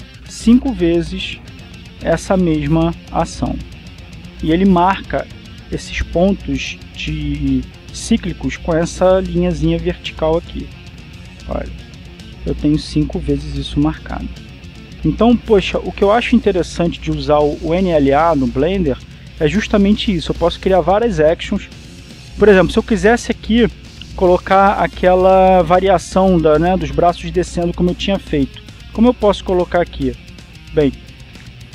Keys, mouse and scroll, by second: 12.0-13.1 shift+middle drag, 12.9 shift+click, 15.2 shift+middle click, 15.8 shift+middle click, 16.6 middle click, 18.1-19.2 shift+middle drag, 19.6-24.1 drag, 29.0 click, 30.7-31.7 drag.